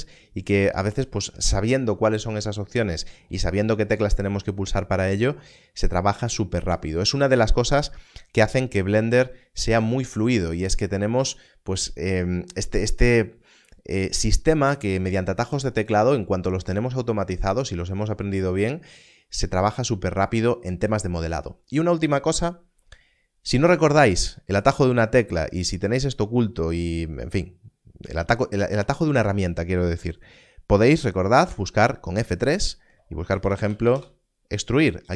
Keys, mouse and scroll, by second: 31.4 F3, 33.3 e, 33.6 x, 33.8 r, 33.9 u.